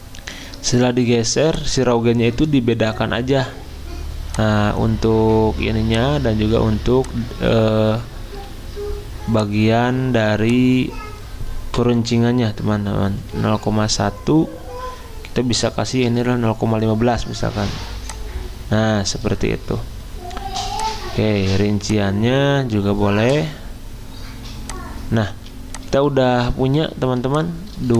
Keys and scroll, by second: 12.8-13.8 typing, 16.1 5, 25.3 z, 27.2 v.